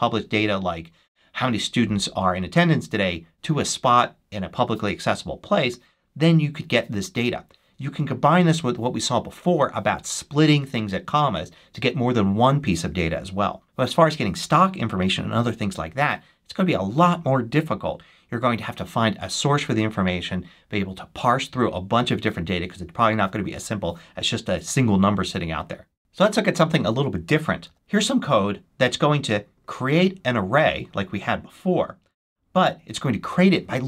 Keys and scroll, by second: 26.0 BackSpace, 27.6 super+v.